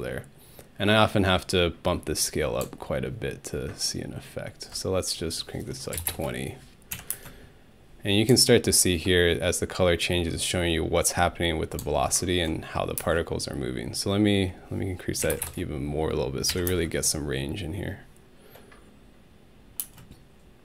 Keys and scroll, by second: 5.7-7.1 typing, 6.9 Home, 13.0 alt+space, 15.0-16.7 typing, 16.5 Home, 19.8 space.